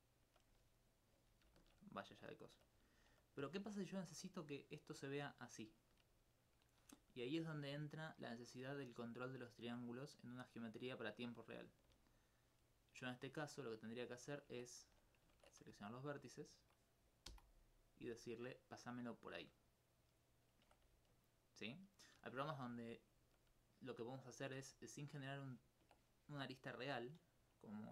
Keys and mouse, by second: 0.8 right click, 3.0 alt+click, 3.9 alt+click, 4.3 click, 4.4 click, 11.9 d, 12.1 right click, 12.4 right click, 14.8 ctrl+Tab, 15.4 ctrl+Tab, 15.6 ctrl+1, 16.0 right click, 16.4 shift+right click, 20.6 Tab, 21.1 alt+click, 21.8 alt+click, 24.6 Tab.